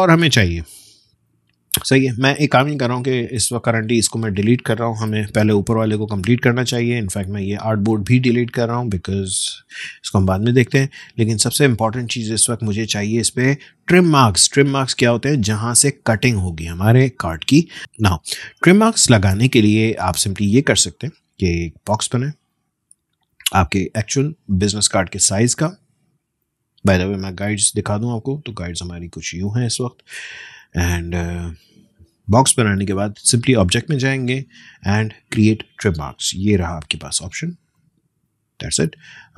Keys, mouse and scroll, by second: 3.8 click, 5.1 BackSpace, 6.8 click, 11.9-12.6 alt+scroll up 1, 12.8 space, 13.1 click, 13.3 space, 17.8 BackSpace, 18.5 space, 18.7 click, 19.0 space, 20.4 click, 23.3 click, 23.4-27.4 drag, 27.4 ctrl+;, 33.1 click, 37.7 click.